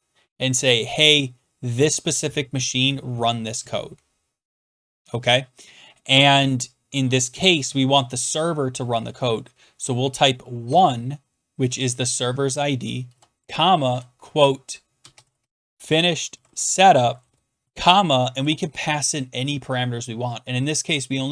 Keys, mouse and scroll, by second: 10.6 typing, 12.8-17.6 typing.